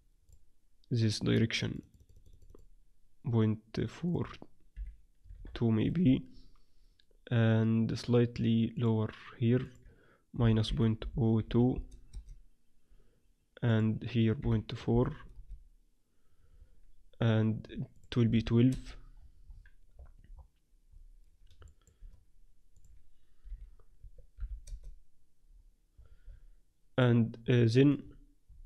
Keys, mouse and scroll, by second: 1.6-5.9 drag, 8.7-11.4 drag, 13.7-15.5 drag, 17.9-19.9 drag, 19.1-24.1 middle drag, 22.7-24.6 drag, 25.9-28.6 middle drag, 27.9 a.